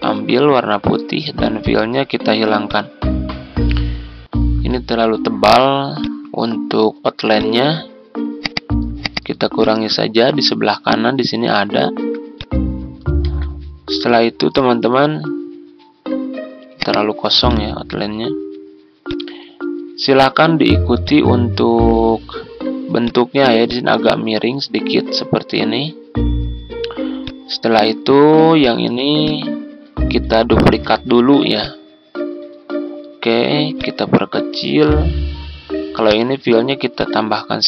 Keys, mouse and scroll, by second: 3.5 Tab, 5.9-9.2 drag, 11.9 z, 12.3 click, 13.2 ctrl+z, 14.0 ctrl+z, 14.5-26.0 drag, 28.1 ctrl+z, 28.5 click, 30.6 ctrl+d, 31.6-34.7 drag, 36.0-37.6 drag.